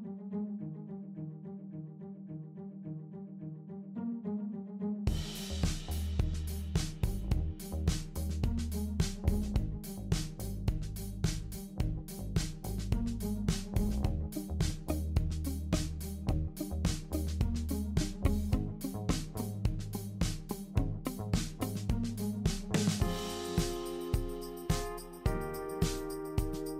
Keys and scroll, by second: 4.0-4.7 typing, 14.3-14.9 typing.